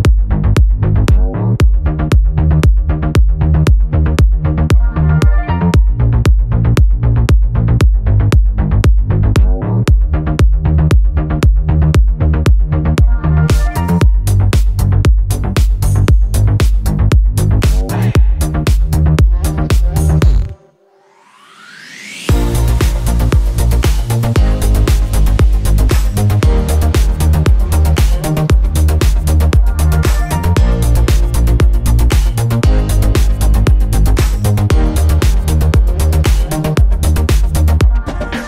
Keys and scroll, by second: 1.3 Up, 1.5 Left, 2.2 Up, 2.7 ctrl+t, 5.1 Return, 5.4 Up, 6.0 Right, 7.4 Down, 9.2 Left, 9.6 Down, 11.9 Return, 18.9 ctrl+g, 20.2 t, 21.5 Return, 27.6-30.9 typing, 31.4 ctrl+Return, 37.6-38.4 typing.